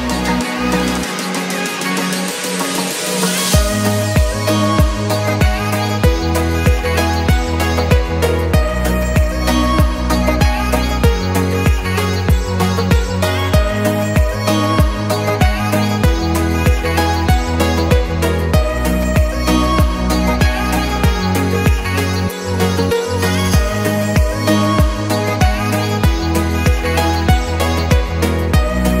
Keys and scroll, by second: 0.6 Return, 1.0 Escape, 2.2 Escape, 8.0 2, 8.2 0, 8.4 Return, 9.2 Escape, 19.3 Escape, 21.7 Escape, 23.9 5, 24.1 Return.